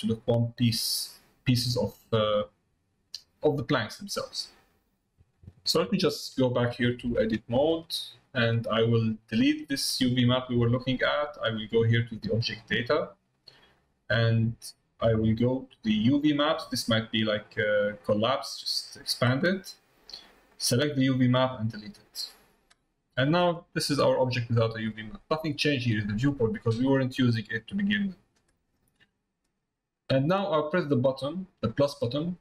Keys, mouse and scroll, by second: 3.5 middle click, 7.4 shift+middle click, 8.4 middle click, 16.4 click, 18.3 click, 20.5 click, 21.8 click, 23.1 middle click, 24.2 middle click, 24.9 middle click, 27.0 middle click, 27.9 middle click, 28.8 middle click, 31.9-32.4 drag.